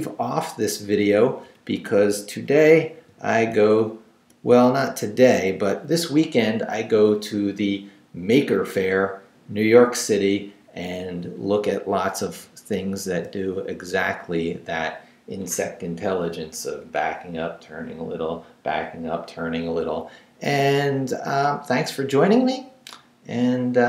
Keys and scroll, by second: 1.2 shift+Down, 2.4 shift+Down, 2.9 shift+,, 4.9 Down, 12.8 Up, 13.3 Left.